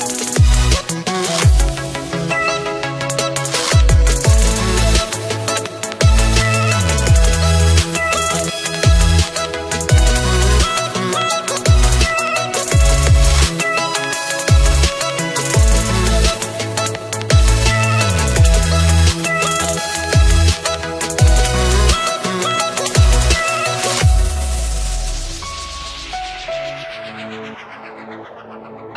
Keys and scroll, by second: 8.1 ctrl+t.